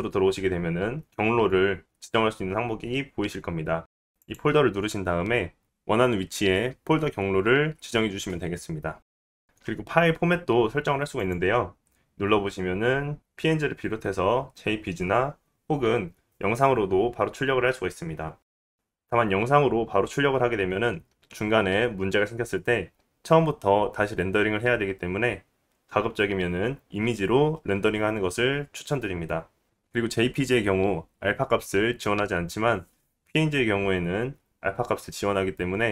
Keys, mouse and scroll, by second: 5.6-35.9 drag.